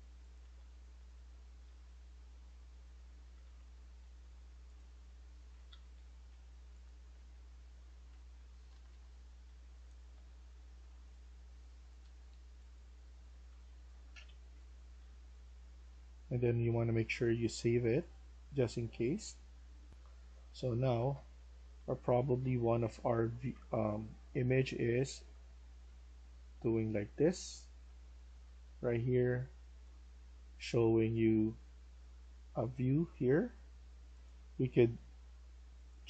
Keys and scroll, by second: 0.0-7.0 typing, 8.6 Escape, 8.8 Escape, 9.4-10.8 typing, 11.9 Escape, 12.2 Escape, 13.2-16.3 typing, 19.8 F1, 20.1-29.7 typing.